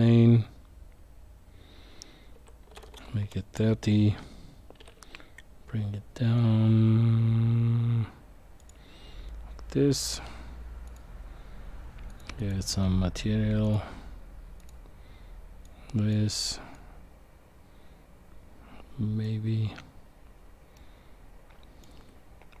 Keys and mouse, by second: 2.3 s, 10.9-12.1 drag, 12.4 click, 13.6 drag, 15.6 click, 16.7-19.2 drag.